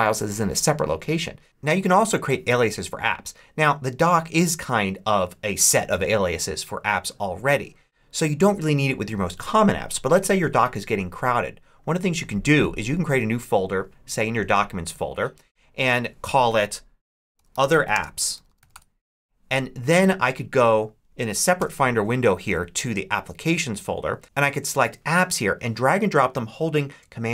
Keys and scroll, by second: 17.0-18.9 typing, 21.4 super+n.